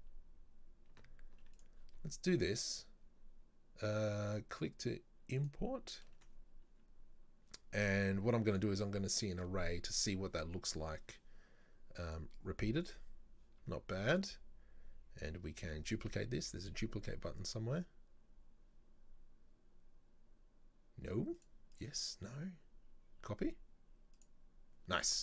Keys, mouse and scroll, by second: 5.4-7.0 ctrl+drag, 7.0 scroll up 1, 8.5 click, 9.1-12.2 drag, 21.4 click, 21.7 click, 24.1 click.